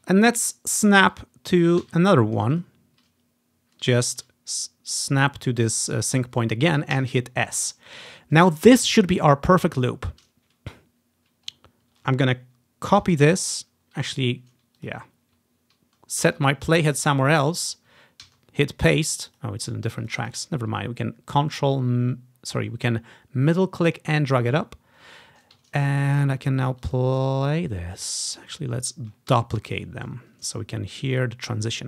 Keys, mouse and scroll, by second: 0.0 click, 1.9 s, 2.6 click, 2.9-4.1 drag, 4.2 ctrl+z, 4.7-6.0 ctrl+drag, 7.1 s, 7.6-9.4 drag, 11.7 ctrl+scroll down 1, 13.1 ctrl+c, 14.9-17.0 drag, 18.4 ctrl+v, 19.4-22.0 drag, 25.8-26.4 ctrl+scroll up 1, 26.1-27.6 ctrl+drag, 28.4 click, 29.4 alt+d, 29.8 click, 30.0-31.8 drag, 31.4-31.8 scroll up 1.